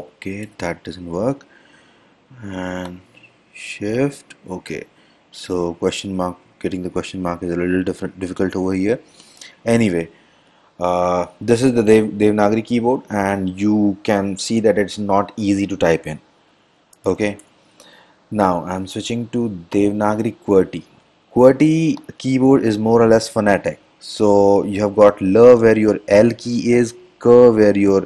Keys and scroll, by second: 0.5 BackSpace, 17.1 Return, 17.5 Return.